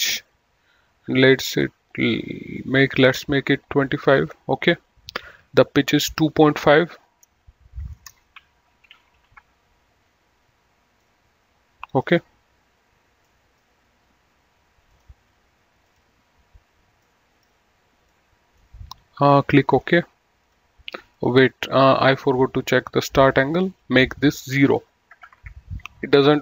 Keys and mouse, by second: 1.4 click, 4.1 KP_2, 6.2 click, 8.0 Delete, 9.0 KP_2, 9.2 KP_Decimal, 9.7 KP_Enter, 11.3 middle click, 13.5 middle click, 15.2 click, 17.4 middle click, 20.0 click, 24.1 click, 25.5 KP_0, 25.6 Return.